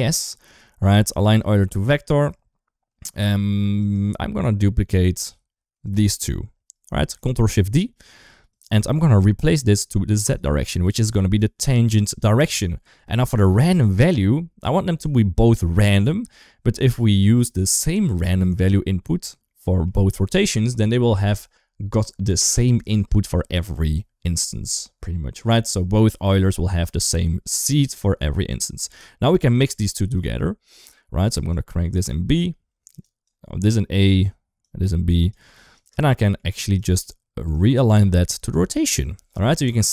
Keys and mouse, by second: 0.3 click, 3.6 click, 4.1 middle click, 5.7 shift+click, 7.1 ctrl+shift+d, 11.3 click, 12.3 click, 13.6 click, 13.9-16.2 drag, 16.9 shift+middle click, 19.5 middle click, 27.5 middle click, 28.3 click, 29.2-30.0 drag, 31.3-32.8 drag, 33.1-33.9 drag, 34.4-35.1 drag, 35.6 click, 36.1 middle click, 36.7 click, 37.5-38.3 drag.